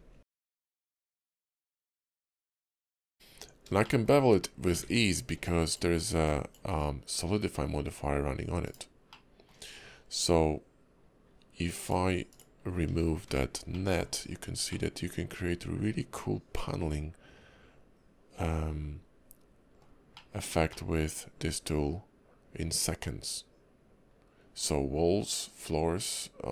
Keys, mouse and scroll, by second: 0.3 ctrl+b, 2.3 middle click, 3.0 scroll up 2, 3.3 Tab, 3.8 shift+middle click, 4.2 scroll up 2, 4.8 ctrl+`, 9.1 middle click, 11.8 click, 12.3 click, 13.3 h, 13.7 middle click, 14.1 scroll down 3, 14.7 middle click, 20.1 shift+middle click.